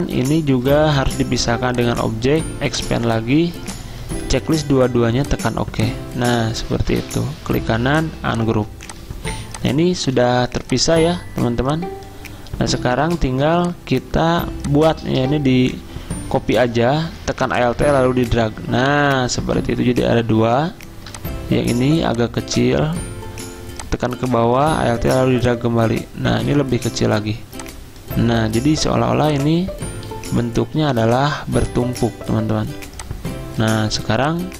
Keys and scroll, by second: 0.8 ctrl+z, 6.7 ctrl+z, 10.2 ctrl+z.